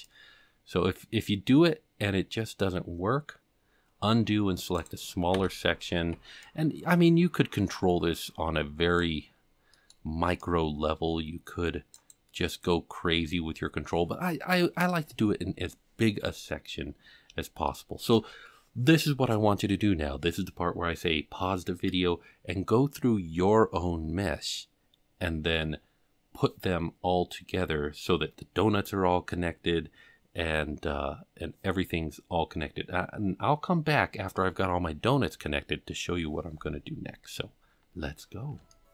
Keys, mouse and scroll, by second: 5.4 f, 5.9 alt+a, 6.1 c, 13.1 f, 16.7-17.2 scroll down 5, 17.7 shift+middle click, 38.0-38.6 scroll up 5, 38.7 shift+middle click.